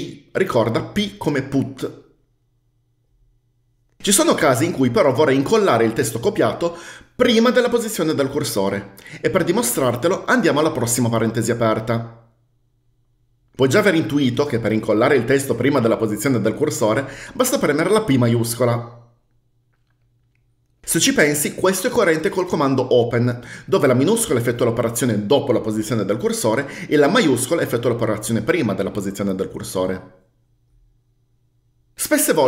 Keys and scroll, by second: 0.1 p, 10.9-11.8 typing, 18.4 shift+p.